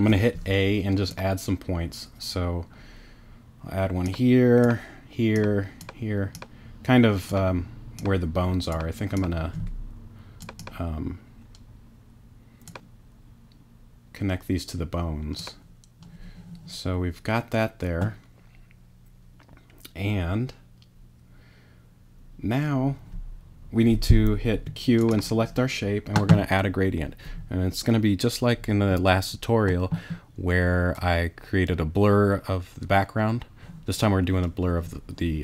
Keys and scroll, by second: 24.5 q.